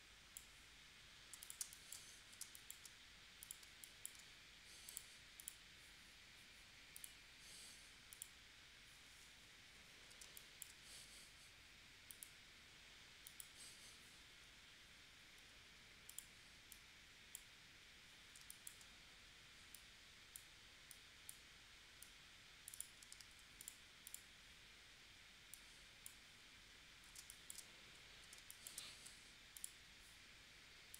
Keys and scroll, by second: 1.3 v, 1.6 space, 2.4 space, 3.6 space, 10.2 space, 15.5 a, 18.5 space, 27.2 space, 28.3 space, 29.1 v.